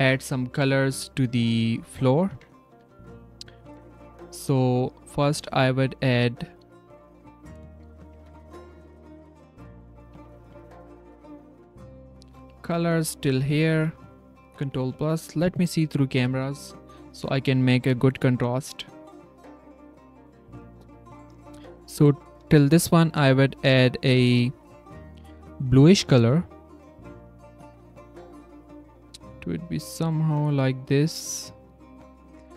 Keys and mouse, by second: 1.5 click, 2.0 click, 2.7 z, 3.0 drag, 3.6 Tab, 4.0 click, 5.7 click, 6.1 click, 6.5 click, 6.7 click, 7.6 s, 7.7 click, 8.1 Tab, 8.4 g, 10.1 Tab, 11.8 shift+click, 22.8 Tab, 23.9 drag, 26.2 click, 32.3 Tab.